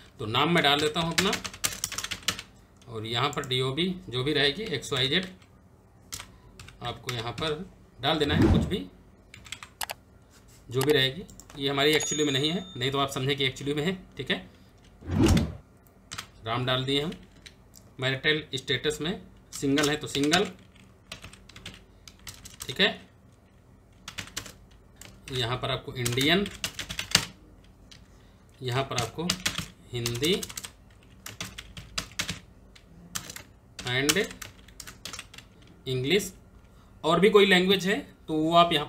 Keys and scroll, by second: 0.2-2.3 typing, 5.8-7.5 typing, 14.5-15.8 typing, 18.1 Down, 19.2-27.1 typing, 27.6 Down, 28.4-29.7 typing, 30.8-35.3 typing.